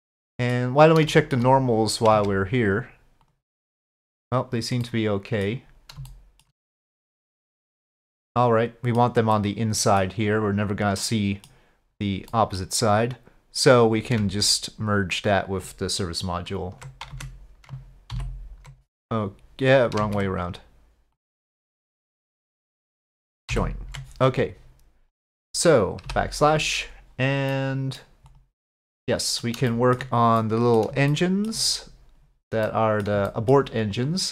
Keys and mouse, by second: 1.1 shift+middle drag, 2.2 Tab, 3.3-4.6 drag, 4.9 middle click, 6.1 shift+middle click, 6.7-9.0 middle drag, 9.4 middle click, 11.0 middle click, 12.3 middle click, 15.0-16.9 ctrl+drag, 17.1 Tab, 18.2 ctrl+j, 20.0 ctrl+z, 21.2 click, 22.3 ctrl+click, 23.5 ctrl+j, 26.1 KP_Divide, 27.5-28.0 middle drag, 28.3 click, 28.8-29.4 middle drag, 29.7 shift+middle drag, 30.4-30.8 middle drag, 31.1-31.5 shift+middle drag, 32.7-33.1 middle drag, 33.3 shift+middle click.